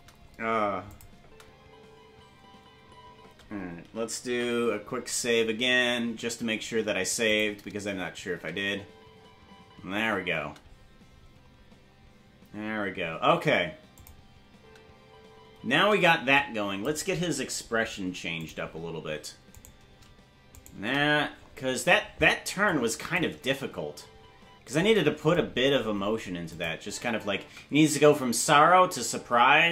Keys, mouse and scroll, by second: 0.9 click, 1.2 space, 6.1 ctrl+s, 7.3 click, 8.3 space, 13.9 click, 13.9 space, 14.5 space, 16.3 click, 18.4 click, 19.7 right click, 20.7 shift+right click, 22.7 click, 24.5 space, 25.5-26.5 scroll down 1, 26.5 click, 26.5 scroll down 6, 26.8 space.